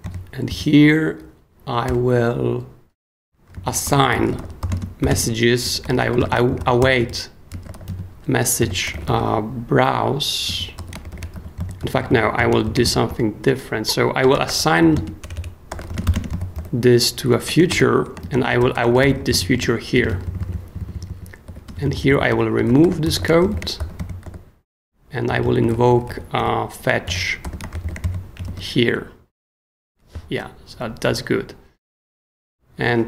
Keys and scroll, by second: 0.5 super+k, 1.2 k, 1.8 shift+o, 3.3-26.4 typing, 27.1 super+i, 27.5-28.3 typing, 28.4 shift+super+s, 29.0 super+s.